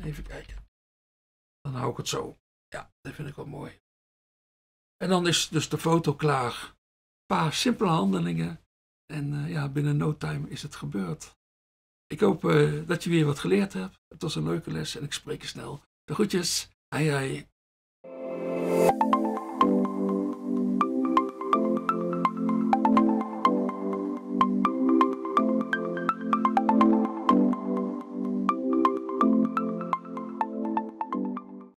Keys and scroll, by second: 0.0-0.8 typing.